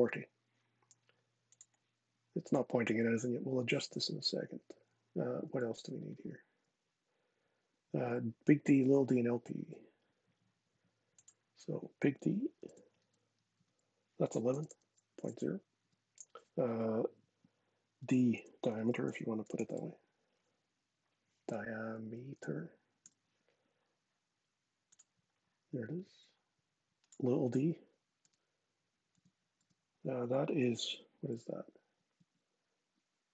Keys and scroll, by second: 5.3 super+Tab, 9.3 super+Tab, 12.3 shift+d, 13.2 Tab, 14.0-15.5 typing, 15.5 Tab, 17.7-19.9 typing, 21.5 Left, 21.7 Left, 21.9 BackSpace, 22.7 e, 27.9 d, 28.8 Tab, 29.3 Tab, 31.0 super+Tab, 31.9 super+Tab.